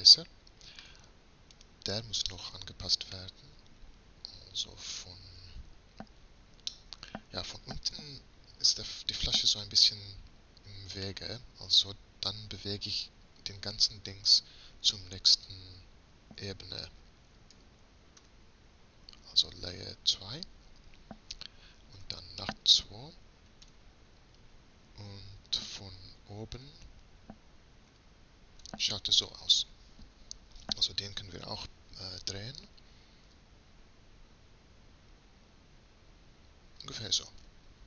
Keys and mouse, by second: 1.7-8.0 middle drag, 8.7 middle click, 10.0 middle click, 10.3 middle click, 10.5 middle click, 11.9 Tab, 17.6 m, 22.0 2, 23.7 Tab, 26.6 KP_7, 28.0 KP_Decimal, 33.4 r.